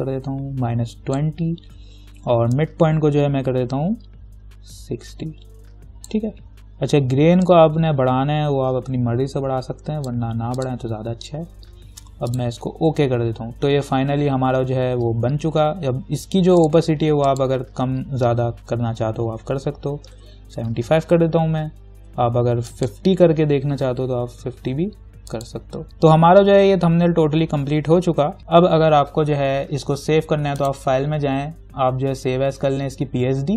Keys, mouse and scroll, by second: 10.5 click, 16.8 click, 20.0-20.9 typing, 22.9 click, 23.7-24.5 typing, 25.5 click, 27.3 scroll down 1, 28.4 ctrl+g, 30.8 click.